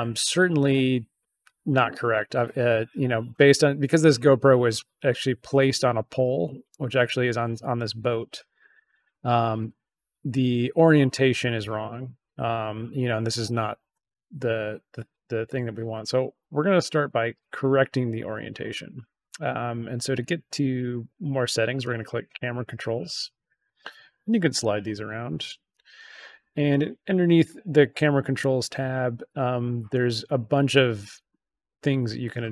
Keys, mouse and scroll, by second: 21.7 click, 23.6 click, 25.6 click, 28.3 click.